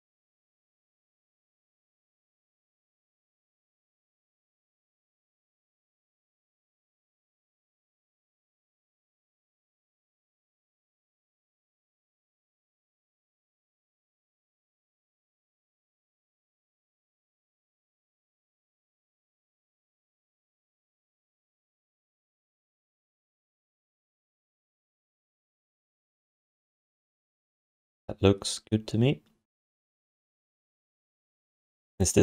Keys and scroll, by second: 7.9 q, 8.6 alt+shift+d, 8.8 3, 11.0 ctrl+alt+r, 15.8 6, 22.5 7, 23.8 6, 30.3 1.